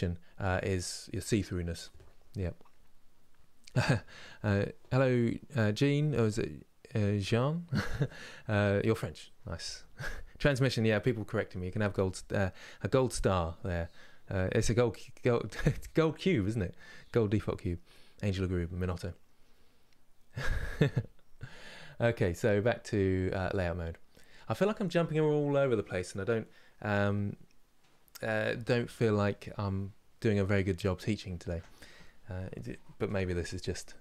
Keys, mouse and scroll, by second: 23.9-24.2 scroll down 2.